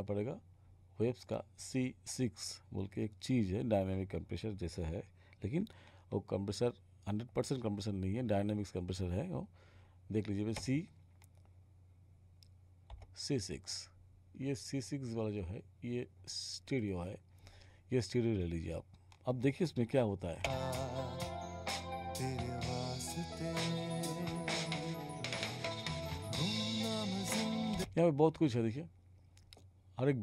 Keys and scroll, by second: 12.9 6, 20.4 space, 27.8 space.